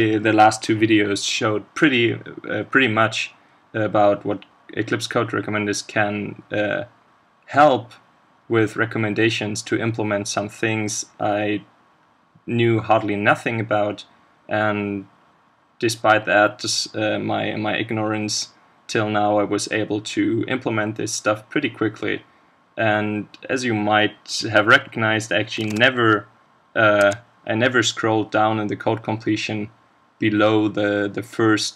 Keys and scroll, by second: 25.6 ctrl+space.